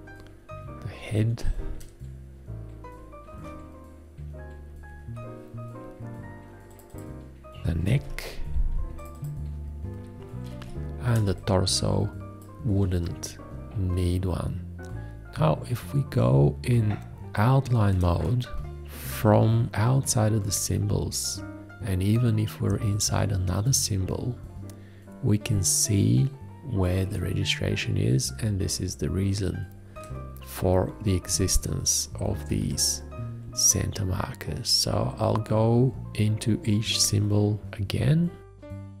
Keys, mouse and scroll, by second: 1.2 F2, 3.3 alt+`, 7.9 alt+`, 10.5 ctrl+a, 11.3 space.